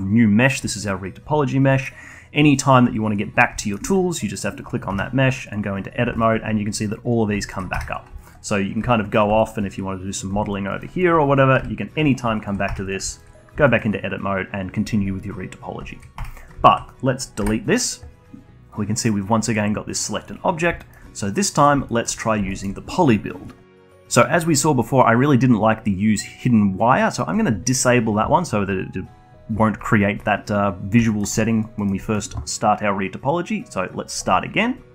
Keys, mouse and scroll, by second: 2.1 middle click, 4.0 alt+middle click, 4.7 click, 5.3 Tab, 6.5-8.1 alt+drag, 8.1 Tab, 8.6-8.9 alt+drag, 9.1 scroll down 3, 9.2-9.6 alt+drag, 9.8-10.8 alt+middle drag, 10.8-11.8 alt+drag, 12.0 f, 12.3 scroll up 1, 12.5-13.0 alt+drag, 13.0 Tab, 13.8 scroll up 1, 14.1-16.0 alt+middle drag, 16.0 scroll down 1, 16.3 alt+click, 16.6 Tab, 17.0 alt+click, 17.8 Delete, 20.6 click, 20.9-21.2 scroll down 1, 21.2 alt+middle click, 22.0 click, 22.3-23.6 alt+middle drag, 27.3 click, 31.1-31.4 alt+middle drag, 31.4 alt+click, 31.8-34.1 alt+middle drag, 34.1-34.9 drag.